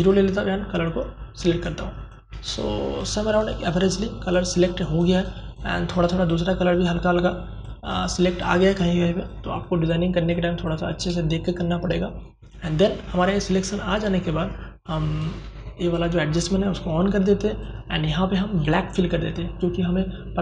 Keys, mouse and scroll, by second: 0.4 ctrl+space, 0.5 ctrl+click, 0.9 ctrl+space, 1.5 click, 1.7 space, 2.3-9.5 ctrl+drag, 14.1-16.5 drag.